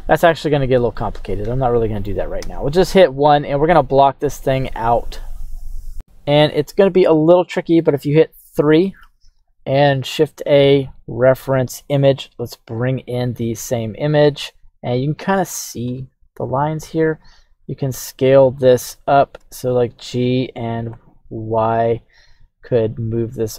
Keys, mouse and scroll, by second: 0.9-2.1 middle drag, 2.4 KP_1, 6.6-7.9 middle drag, 8.3 KP_3, 10.0 shift+a, 13.6 s, 15.2 click, 17.1 s, 18.5 click, 19.4 g, 20.9 y.